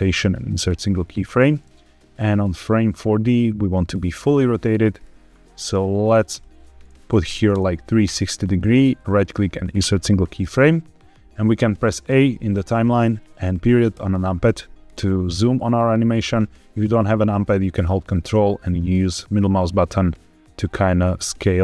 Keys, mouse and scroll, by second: 1.6-4.9 drag, 6.2-7.9 drag, 8.8 right click, 13.8 KP_Decimal, 14.8-15.2 scroll down 3, 15.2 shift+middle click, 18.0-21.6 ctrl+middle drag.